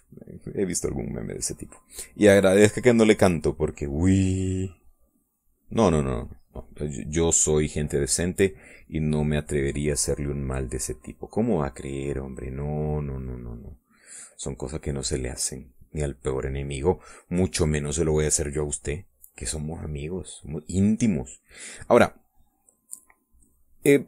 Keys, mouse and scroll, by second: 1.1 click, 2.8 click, 3.2-7.4 drag, 7.5-9.0 middle drag, 9.3-12.3 drag, 12.4 click, 12.8 click, 13.8 click, 19.0-20.2 drag, 20.8-24.0 drag.